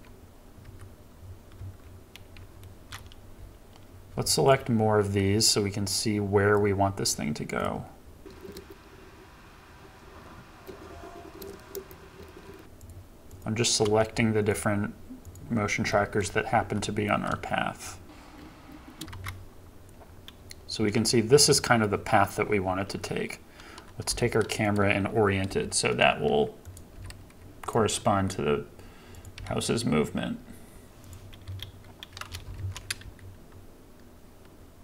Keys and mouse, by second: 0.6 KP_7, 1.6 KP_0, 2.5-2.9 shift+middle drag, 8.2 shift+middle click, 8.7-10.8 drag, 11.4 KP_7, 11.7 KP_0, 15.2 shift+click, 16.0 shift+middle drag, 16.2 shift+middle drag, 19.1 KP_7, 24.1 g, 25.5 r, 27.0 g, 27.8 r, 29.3 g, 31.4 KP_0, 32.6 shift+Left, 33.0 space.